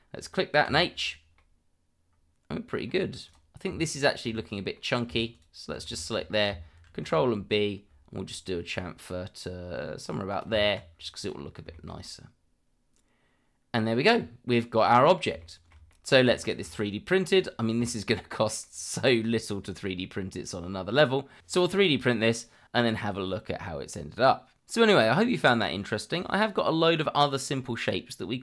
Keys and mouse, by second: 0.6 h, 1.4-2.7 middle drag, 3.2 click, 4.1 Tab, 4.7 middle click, 5.3 alt+click, 5.9 shift+middle drag, 6.9 ctrl+b, 10.3 click, 10.5 Tab, 11.2 click, 11.7 shift+middle drag, 12.0-13.9 middle drag, 14.5-15.1 middle drag, 15.4-15.7 shift+middle drag, 15.9 middle drag, 16.4 shift+middle drag, 16.8-17.2 middle drag, 17.4 click, 17.9 shift+middle drag, 18.6-19.2 middle drag, 20.1-21.8 middle drag, 22.1-22.6 middle drag.